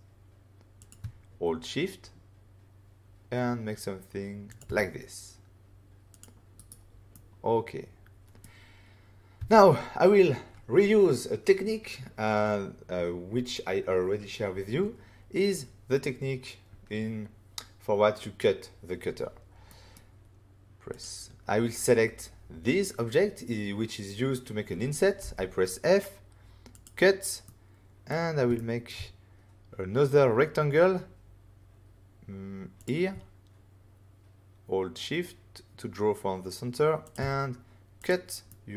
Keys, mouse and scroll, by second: 0.8 click, 4.4 shift+click, 4.5 shift+click, 6.1 click, 6.2 click, 6.5 right click, 6.6 double right click, 7.1 middle click, 9.3 <, 19.6 middle click, 20.9 click, 25.2 f, 26.7 click, 27.4 middle click, 28.5 shift+middle click, 28.8 middle click, 32.7 click, 37.0 shift+click, 37.1 shift+click, 38.0 click, 38.0 click, 38.4 middle click.